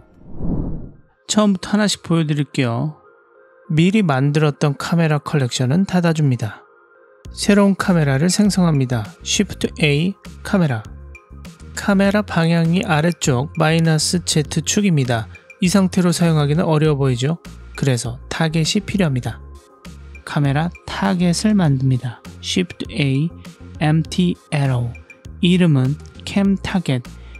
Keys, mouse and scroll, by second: 1.4-2.6 drag, 4.0 click, 4.4 click, 5.0 click, 6.4 click, 7.1 click, 8.2 click, 9.8 shift+a, 12.0 g, 12.5 click, 12.9 g, 13.2-14.3 drag, 15.2 g, 15.9 click, 16.2 g, 18.5-19.9 drag, 20.8 click, 22.2 shift+a, 25.8-27.2 drag.